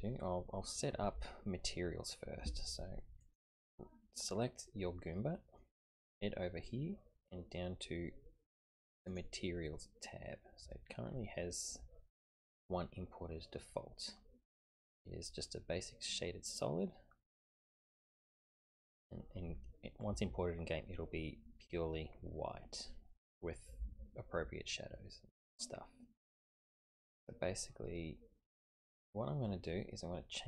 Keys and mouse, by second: 3.2 click, 4.7-5.4 middle drag, 5.4 click.